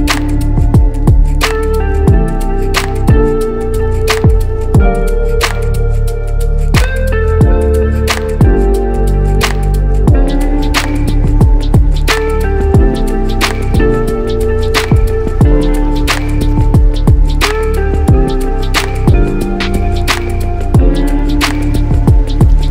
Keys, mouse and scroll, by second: 0.0 1, 0.2 0, 1.4 Return, 2.3-3.3 alt+middle drag, 3.7 click, 5.2 click, 6.0-7.0 drag, 9.4 click, 11.1 click, 15.2 KP_Add, 15.5 KP_Add, 16.5 s, 16.6 s, 17.1 z, 19.2 Return, 20.5-22.7 alt+middle drag.